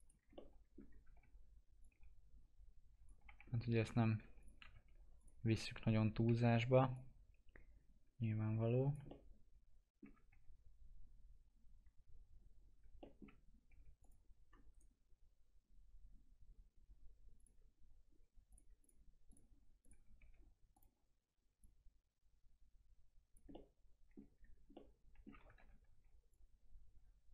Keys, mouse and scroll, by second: 0.3 alt+middle click, 0.8 scroll down 1, 1.0 w, 1.8 click, 3.2 F4, 3.4 scroll up 1, 3.8 F4, 4.3 click, 4.6 alt+x, 5.1 click, 5.4-6.0 scroll up 1, 6.2 e, 6.9-9.0 drag, 9.0 alt+middle click, 10.2 w, 12.9 alt+middle click, 13.6 2, 14.0 click, 14.7 right click, 17.3 click, 20.1 w, 20.7-23.5 drag, 23.5 alt+middle click, 24.3-24.6 scroll down 1, 24.7 alt+middle click, 25.5 ctrl+z, 26.2-27.3 drag.